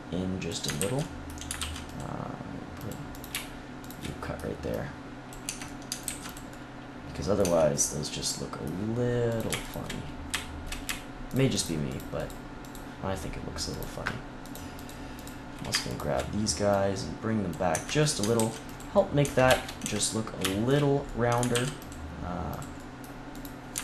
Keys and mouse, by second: 0.7 ctrl+z, 0.9 click, 1.1-4.3 middle drag, 1.5 ctrl+r, 4.0 click, 4.0 right click, 5.4 Tab, 5.6-6.7 drag, 6.0 ctrl+s, 7.4 Tab, 9.3-12.2 drag, 16.6-17.6 middle drag, 17.6 Tab, 17.9 click, 18.3 ctrl+s, 19.8 Tab, 21.5 ctrl+r, 22.5-23.8 drag.